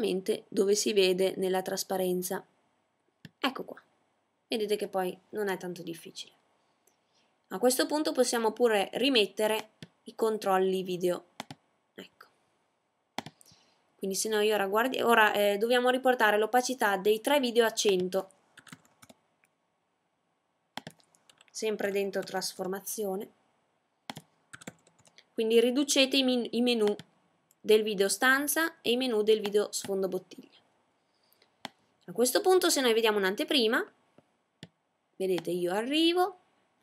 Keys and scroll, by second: 16.6-17.4 typing, 18.9 typing.